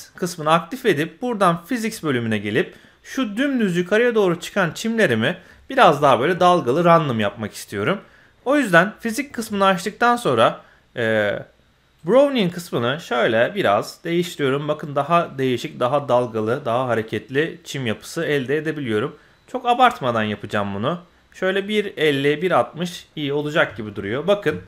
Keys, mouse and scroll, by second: 1.8 click, 2.4-2.9 middle drag, 3.1-3.5 scroll up 1, 6.6-6.9 scroll down 1, 6.9 middle click, 8.6-9.6 scroll down 2, 9.6-10.0 scroll down 1, 12.0-20.2 drag, 21.5 click, 22.4 click, 22.9-23.2 scroll down 2, 23.2-23.5 middle drag, 23.7 shift+middle click, 24.0-24.5 scroll up 1, 24.5 shift+middle click.